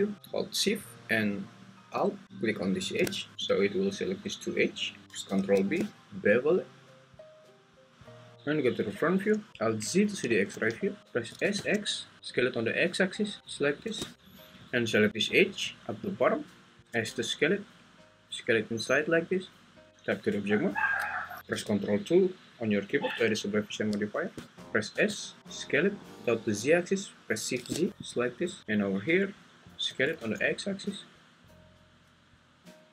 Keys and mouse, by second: 2.6 alt+shift+click, 3.4 `, 5.2 ctrl+b, 10.3 alt+z, 11.3 s, 11.5 x, 17.0 s, 19.9 Tab, 22.9 ctrl+2, 25.0 s, 27.5 shift+z, 29.9 s, 30.2 x.